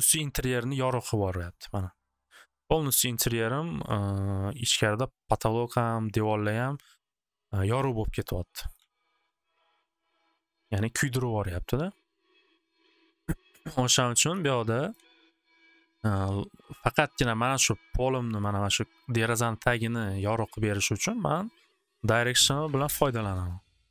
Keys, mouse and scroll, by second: 2.9 click, 3.2 click, 8.6 click, 8.7 click, 8.8 5, 9.0 Return, 13.7 click, 14.0 click, 14.2 click, 14.2 0, 14.9 click, 15.0 5, 15.2 Return, 22.5 click, 22.7 typing, 22.9-23.9 Return.